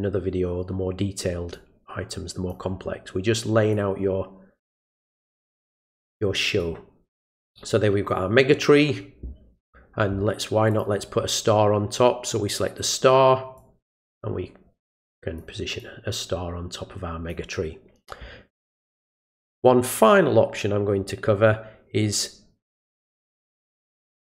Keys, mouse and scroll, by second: 1.5 click, 3.7 click, 5.1 click, 5.9 click, 6.6 click, 10.7 click, 13.6-15.4 drag, 15.8-17.3 drag.